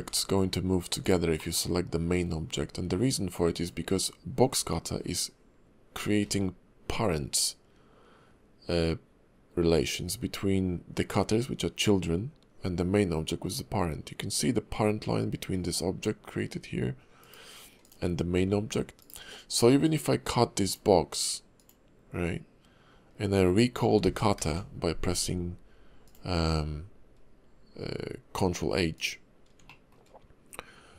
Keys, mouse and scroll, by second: 0.0 g, 1.4 middle click, 3.5 click, 6.2 g, 17.8 click, 18.3 g, 19.8 click, 24.4 alt+h, 25.2-26.0 scroll up 2, 26.0 click, 28.9 click, 29.7 shift+middle click.